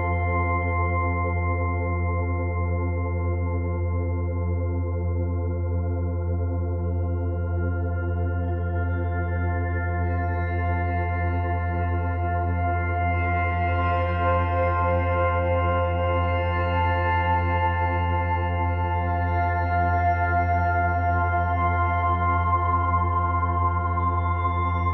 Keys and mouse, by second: 0.0-3.8 typing, 5.3 click, 6.9 click, 9.7 click, 11.3-13.9 drag, 14.0 click, 14.9 click, 15.9-17.8 drag, 17.8-18.2 typing, 18.8 click, 19.8 ctrl+alt+click, 20.6 alt+shift+click, 21.1-22.1 ctrl+alt+drag, 22.5 click.